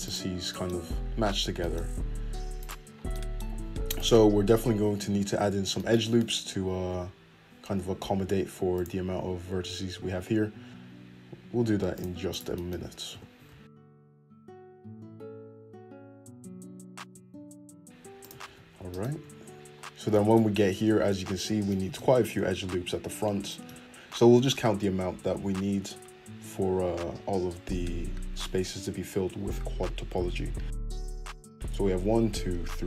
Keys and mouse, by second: 3.5 click, 3.8-4.8 middle drag, 4.8 click, 4.9-11.8 middle drag, 5.2 `, 5.8 `, 7.8 f, 11.8-14.2 shift+right drag, 12.6 f, 13.7 f, 14.2 middle click, 14.7 click, 14.7-17.4 middle drag, 15.3 f, 17.4 click, 17.5 shift+middle click, 18.6 f, 19.3 Tab, 19.6 `.